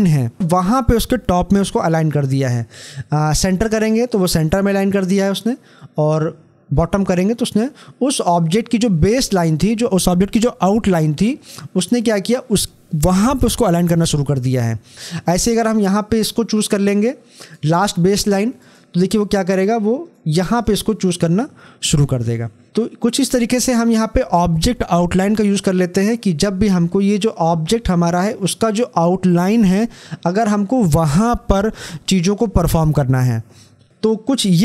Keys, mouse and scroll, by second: 17.3 click.